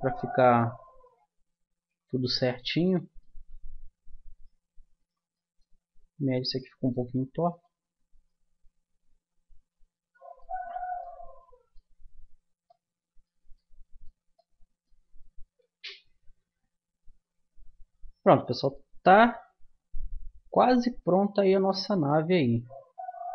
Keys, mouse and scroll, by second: 3.5 Tab, 4.3-6.5 drag, 6.5 middle click, 8.3-9.4 middle drag, 9.8 middle click, 11.0-14.0 middle drag, 19.2 KP_0, 20.2-23.3 middle drag.